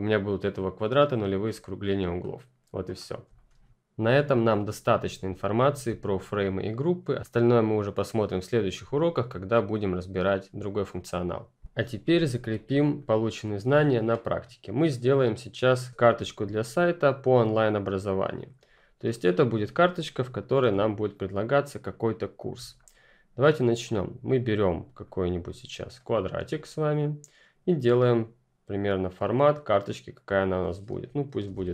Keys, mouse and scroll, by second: 2.2-2.7 ctrl+scroll down 1, 2.7 ctrl+click, 2.9-3.3 ctrl+scroll up 1, 5.8 click, 6.0-6.8 ctrl+scroll down 1, 6.8-7.1 scroll down 1, 12.5 click, 13.6 Delete, 13.9 click, 14.2-15.8 scroll down 1, 15.8 scroll up 1, 20.0 F10, 20.0-20.5 scroll down 1, 20.5 scroll up 2, 20.8-21.7 ctrl+scroll down 1, 21.7-22.6 ctrl+scroll up 1, 22.6-22.9 scroll up 1, 22.9-24.0 scroll down 1, 24.4 click, 31.2-31.7 typing.